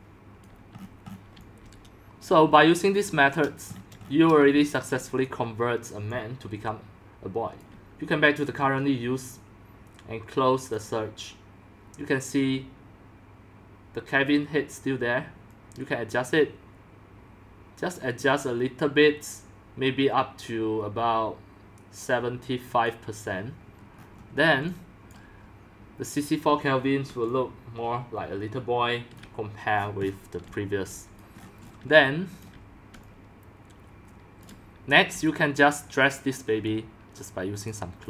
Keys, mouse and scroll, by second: 0.0-2.3 typing, 0.1 click, 0.6 click, 0.8-1.3 scroll down 13, 1.7 scroll, 2.3 click, 2.6 scroll up 1, 2.7-3.1 shift+scroll, 3.7 scroll, 3.8 scroll, 3.9-4.9 shift+middle drag, 4.5-7.5 typing, 5.1 shift+middle drag, 5.3-7.5 drag, 8.8-15.9 drag, 22.8-24.0 drag, 24.0-24.4 scroll down 6, 24.4 middle drag, 24.7-25.4 typing, 25.1 click, 27.1-29.1 typing, 29.1 click, 29.7-30.4 scroll down 12, 30.4 scroll up 10, 30.4 x, 31.2 click, 31.4 middle click, 31.4-31.9 scroll, 31.9-36.6 typing, 32.6 click, 33.6 scroll down 1, 33.7-36.3 drag, 37.7 drag.